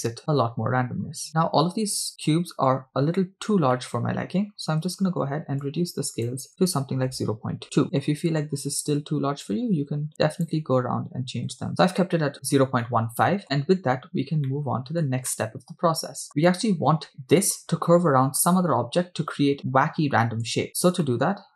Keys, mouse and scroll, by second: 1.5-2.0 scroll down 3, 2.2 shift+middle click, 3.7 shift+middle click, 5.8-7.8 shift+drag, 7.9-8.5 middle drag, 7.9 scroll up 3, 9.8-12.2 shift+drag, 12.9-13.4 middle drag, 14.6-15.0 shift+middle drag, 15.3-16.3 middle drag, 17.1-17.5 scroll down 2, 19.0-19.5 scroll down 2, 21.0 middle click, 21.1 click, 21.1 middle click.